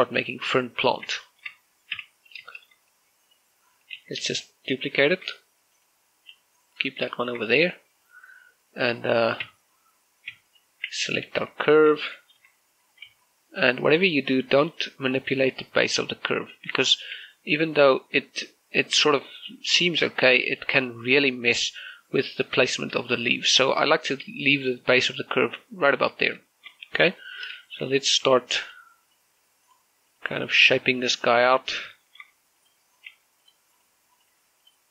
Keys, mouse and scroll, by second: 0.2 shift+middle click, 1.2-1.8 scroll up 1, 2.0 shift+middle click, 3.4 shift+middle click, 4.0 right click, 4.6 scroll down 1, 4.8-5.9 typing, 5.2 click, 6.6 click, 7.1 g, 7.6 click, 7.9 shift+middle click, 8.5 right click, 8.7-10.2 scroll up 1, 10.2 Tab, 10.5-11.1 scroll down 1, 11.1 Tab, 11.3 right click, 11.7 z, 12.0 scroll up 1, 12.2 Tab, 12.9 right click, 13.2-13.9 typing, 14.1 scroll down 1, 14.4 click, 14.9 right click, 15.2-15.6 scroll up 1, 15.6 right click, 15.8 g, 17.1 right click, 17.4 z, 17.6 middle click, 18.0 g, 21.0 right click, 21.4 shift+middle click, 21.8 g, 22.5 right click, 23.9 shift+middle click, 27.0 scroll down 1, 27.3 shift+middle click, 28.4 a, 28.8 right click, 29.0 g, 29.4 click, 29.8 right click, 30.0 g, 30.4 click, 30.9 right click, 31.0 g, 31.4 click, 31.9 right click, 32.1 g, 32.5 click, 32.8 shift+middle click, 33.2 g, 33.4 click, 33.8 right click, 33.9 g, 34.2 click, 34.6 right click.